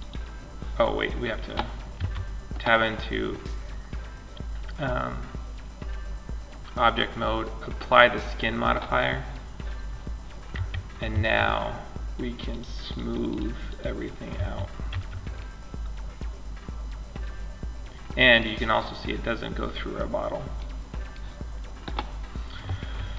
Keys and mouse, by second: 0.8 click, 1.2 Tab, 7.0 click, 9.7 Tab, 10.3 a, 11.7-14.7 drag, 13.5 a, 14.1 Tab, 14.7-16.5 middle drag, 19.4-23.1 middle drag.